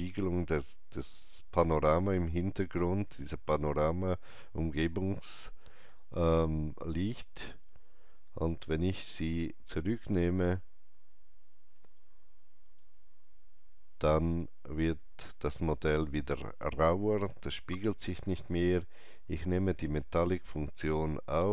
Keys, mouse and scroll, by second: 8.5-15.3 alt+drag, 18.1-21.5 alt+drag.